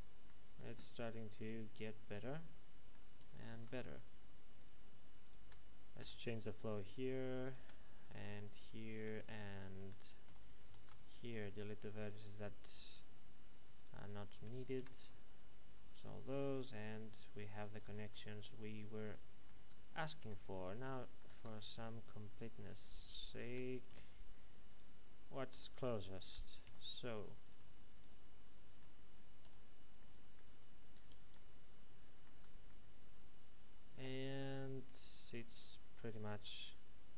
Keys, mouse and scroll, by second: 1.5 click, 2.2 middle click, 4.0 click, 4.6 right click, 5.2 shift+right click, 6.0 j, 6.7 right click, 7.4 shift+right click, 8.1 j, 9.0 right click, 9.5 shift+right click, 10.2 j, 10.7 ctrl+Tab, 11.3 click, 11.9 right click, 13.7 shift+right click, 14.7 x, 15.3 click, 16.0 middle click, 17.6 Tab, 18.1 middle click, 19.5 Tab, 20.0 middle click, 20.4-21.0 scroll down 1, 21.0 middle click, 21.9 click, 22.6 right click, 23.3 shift+right click, 23.9 j, 24.6 right click, 25.9 shift+right click, 26.6 j, 27.4 right click, 27.9 right click, 30.0 middle click, 30.5 Tab, 31.3 middle click, 32.3 Tab, 32.6 middle click, 34.0 Tab, 34.4 middle click, 36.3 ctrl+r.